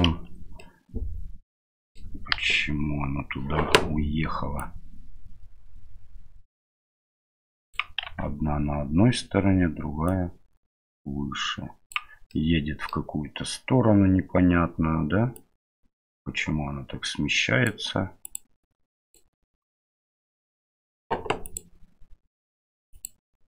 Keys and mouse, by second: 0.0 KP_Divide, 0.6-2.0 middle drag, 2.4 KP_1, 4.7-7.7 drag, 8.0 ctrl+z, 10.1-11.9 drag, 12.3-12.9 middle drag, 15.3-17.7 drag, 18.2-19.1 drag, 19.8 middle click, 21.6-23.1 drag.